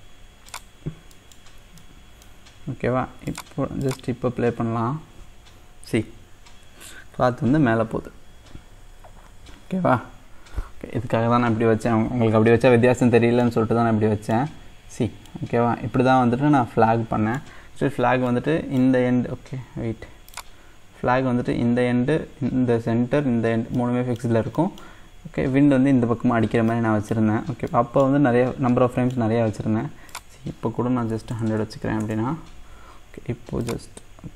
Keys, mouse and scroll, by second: 1.2 middle click, 1.6 scroll down 2, 1.8-3.3 middle drag, 3.3-10.5 drag, 13.1-13.5 scroll up 1, 13.5 middle click, 14.5-15.4 scroll down 1, 15.4-18.1 middle drag, 18.1 scroll up 3, 18.3-20.4 middle drag, 20.4 click, 21.1-23.4 scroll down 1, 23.4-23.8 scroll down 1, 23.8-26.5 middle drag, 26.5 scroll down 1, 26.7 middle click, 27.3-27.7 scroll up 2, 27.7 middle click, 28.4-28.7 scroll up 1, 28.7-30.1 middle drag, 30.1-31.5 drag, 31.5 KP_0, 33.6-34.3 drag.